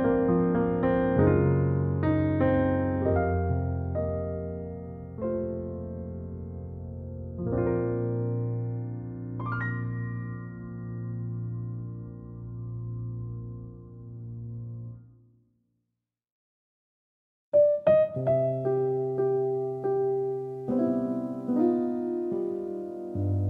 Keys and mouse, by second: 1.8 KP_3, 2.7 alt+middle click, 4.0 KP_3, 4.8-5.8 alt+middle drag, 6.4 3, 6.8 click, 7.4 alt+middle click, 8.2 alt+middle click, 9.8 e, 11.3 ctrl+z, 11.9 x, 13.1 middle click, 13.7 alt+middle click, 14.1 Tab, 14.7 middle click, 15.6 Tab, 15.8 click, 16.4 Tab, 16.6 click, 17.6-19.2 alt+middle drag, 19.6 click, 19.7 Tab, 20.3 click, 20.8 2, 21.2 click, 21.4 click, 22.1 shift+d, 23.0 p.